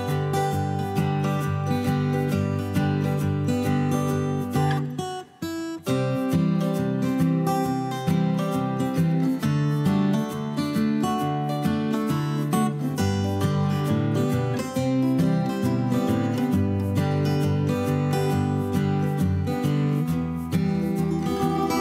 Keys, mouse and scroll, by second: 1.5 m, 5.4 s, 12.8 m.